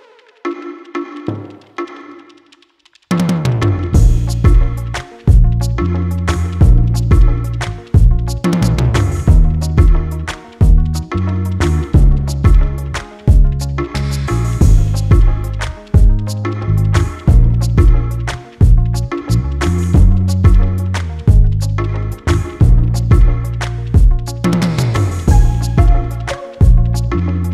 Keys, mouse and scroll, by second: 0.1 click, 1.2 click, 5.8 scroll up 1, 6.5 click, 6.9 scroll up 1, 10.7 click, 12.8 click, 17.5 click, 18.0 scroll up 1, 19.3 click, 22.5 scroll down 1, 23.4 click, 25.7 click.